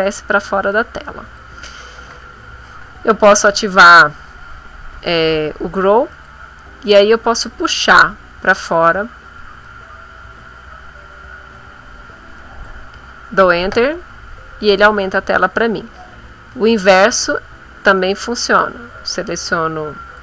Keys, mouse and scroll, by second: 0.6 click, 6.1 click, 7.2-8.9 drag, 9.6-12.8 drag, 13.7 Return, 16.5 ctrl+z, 18.0-20.2 drag.